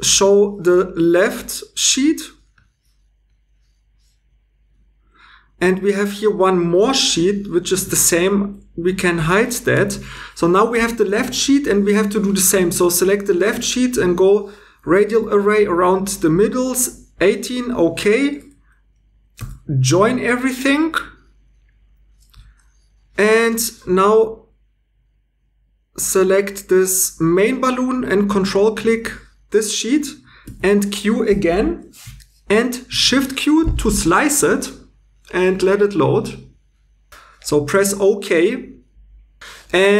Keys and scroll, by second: 6.8 g, 7.0 g, 7.8 ⟲, 9.2 h, 19.4 j, 30.5 q, 32.9 shift+q.